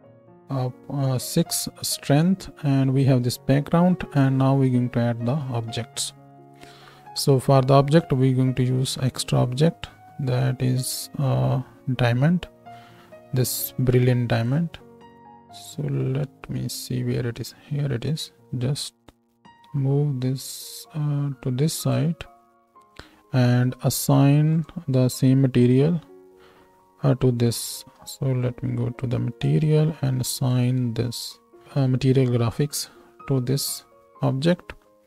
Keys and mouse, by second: 8.1 shift+a, 15.2-21.9 drag, 15.2 g, 16.1 z, 19.6 g, 21.9-24.5 shift+middle drag, 24.5-29.4 drag, 25.1-26.6 right drag, 29.4-30.7 middle drag, 30.7-35.0 drag.